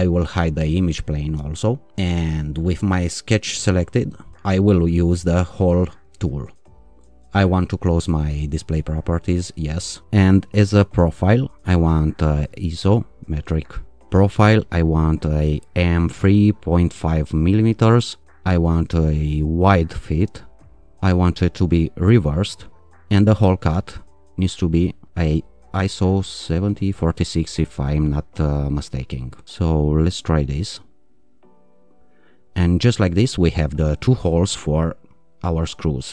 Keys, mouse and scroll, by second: 2.9 alt+click, 6.0 click, 8.6 click, 10.5 click, 12.5 click, 15.0 click, 17.1 click, 18.2 click, 19.8 click, 21.4 click, 23.2 click, 26.1 click, 30.6 click.